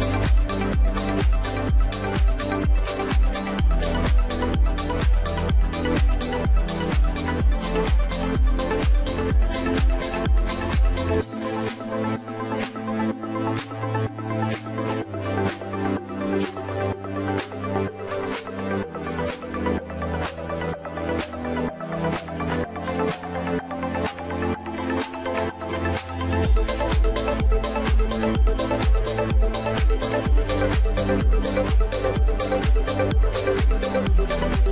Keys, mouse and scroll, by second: 1.7 scroll up 3, 2.0-3.2 middle drag, 3.2 s, 4.6 middle click, 5.3 g, 6.4-7.3 middle drag, 7.3 scroll up 2, 7.5-8.0 shift+middle drag, 8.0 scroll up 2, 8.2 middle click, 8.6 g, 10.0 scroll down 3, 10.1-10.8 middle drag, 10.8 scroll up 2, 10.9 middle click, 11.5 g, 12.8 middle click, 13.9 middle click, 14.1-15.1 scroll down 7, 14.3-14.7 middle drag, 15.1-15.6 scroll up 1, 16.2 click, 16.5-17.1 scroll up 3, 17.1 scroll up 1, 17.1-17.6 drag, 17.6-18.2 right drag, 18.2-18.6 scroll up 1, 18.6-19.5 middle drag, 19.5 Tab, 19.8 middle click, 20.5-21.2 scroll up 1, 21.2 click, 21.4 click, 21.8 click, 22.5 alt+shift+click, 22.9 alt+shift+click, 23.2 scroll down 2, 23.4-24.9 middle drag, 26.3 scroll up 2, 26.8 alt+shift+click, 27.7-28.7 middle drag, 28.7 alt+shift+click, 29.9 ctrl+b, 32.7 Tab, 32.8 scroll down 2, 33.0 middle click, 33.6-34.0 scroll up 3, 34.0 middle click, 34.6 Tab.